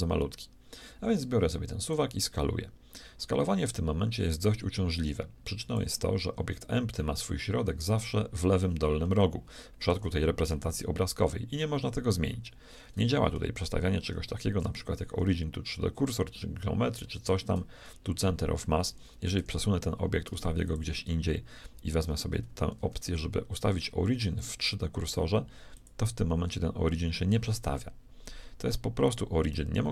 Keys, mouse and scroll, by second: 1.9-4.0 drag, 3.8 right click, 9.2-11.0 middle drag, 14.2 ctrl+alt+shift+c, 19.4 g, 22.8 ctrl+alt+shift+c.